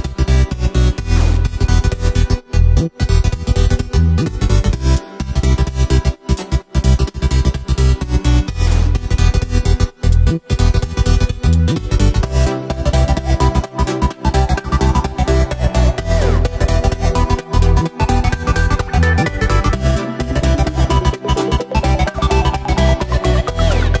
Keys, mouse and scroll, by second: 2.3 right click, 2.7-3.2 middle drag, 3.2 w, 4.9-6.8 middle drag, 6.8 scroll down 1, 7.1-8.0 scroll up 1, 8.0 ctrl+z, 8.4 ctrl+z, 9.2 ctrl+z, 10.0 middle click, 10.9 ctrl+z, 11.1 ctrl+z, 11.4 ctrl+z, 12.5 right click, 13.1 shift+right click, 14.1 ctrl+b, 16.6 Tab, 17.2 w, 21.7-24.0 drag.